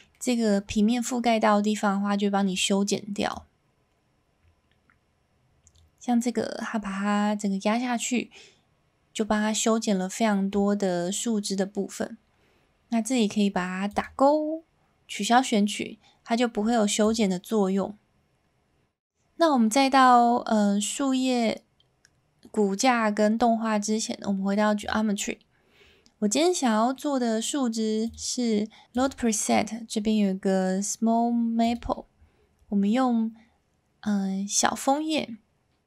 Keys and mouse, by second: 0.1-0.5 middle drag, 1.3-1.8 middle drag, 3.4-10.5 drag, 13.9 click, 17.2-24.8 drag, 26.3-26.9 middle drag, 28.1-28.8 drag, 29.0-31.8 drag.